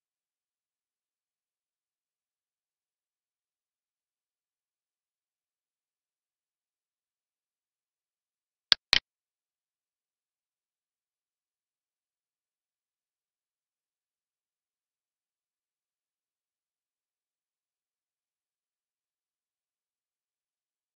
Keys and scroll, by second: 1.7 alt+e, 4.0 ctrl+Left, 4.9 ctrl+Right, 5.1 Left.